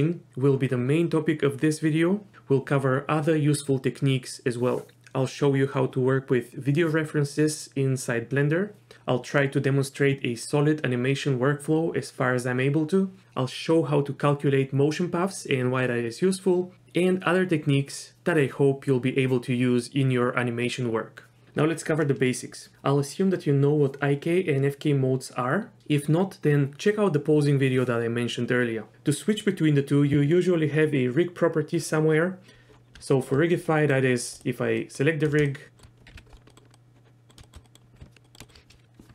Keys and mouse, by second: 33.1 middle click, 33.6 middle click, 34.7 middle click, 35.5 shift+middle drag, 36.1 KP_Decimal, 36.5 middle click, 36.7-37.3 middle drag, 37.4 shift+middle click, 37.6 middle click, 38.2 middle click, 38.4 shift+middle drag.